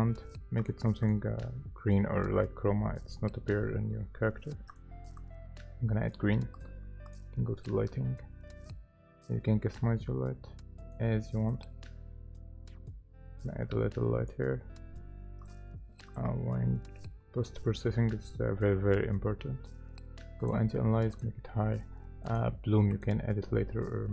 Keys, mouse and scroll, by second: 5.2 double click.